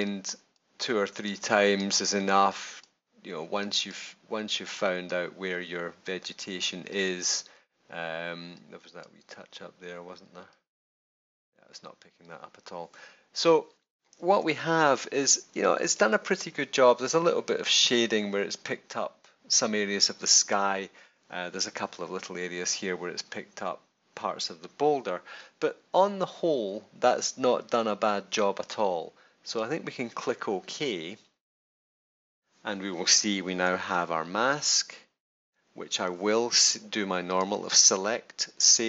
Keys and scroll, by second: 14.4 super+=, 33.6 super+-, 34.6 super+-, 35.4 super+-.